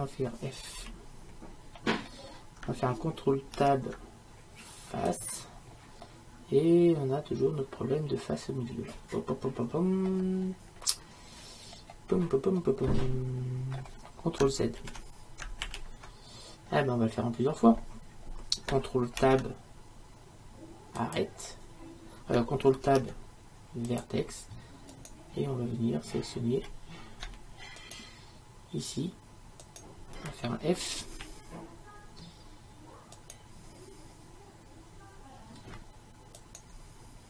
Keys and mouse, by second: 0.8 f, 1.9-3.6 middle drag, 3.6 ctrl+Tab, 6.1 middle click, 7.1-8.4 middle drag, 10.6-12.9 middle drag, 14.8 ctrl+z, 15.7 ctrl+z, 22.9 ctrl+Tab, 25.0-26.1 right drag, 26.4-37.2 right drag, 31.2 f.